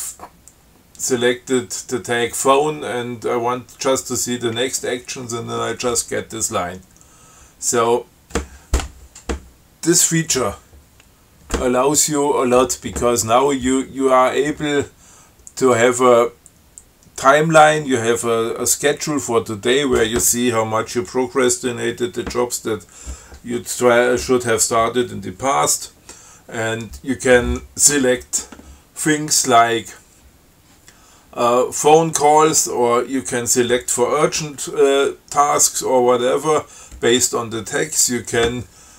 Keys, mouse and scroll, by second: 8.1 q.